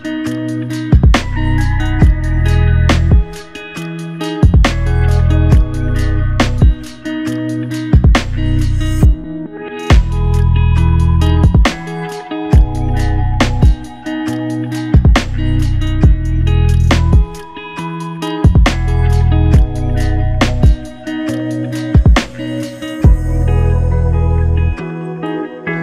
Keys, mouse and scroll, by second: 3.1 double click, 6.3 click, 6.6 ctrl+alt+click, 7.6 alt+click, 10.7 alt+click, 22.4 double click, 25.0 ctrl+alt+click.